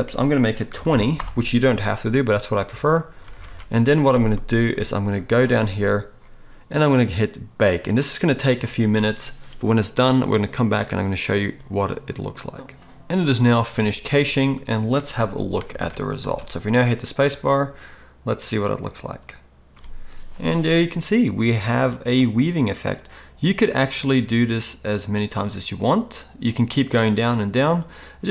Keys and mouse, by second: 3.1 ctrl+s, 3.3 ctrl+s, 3.5 ctrl+s, 12.6 shift+Left, 12.6 space, 15.8 alt+a, 16.3 space.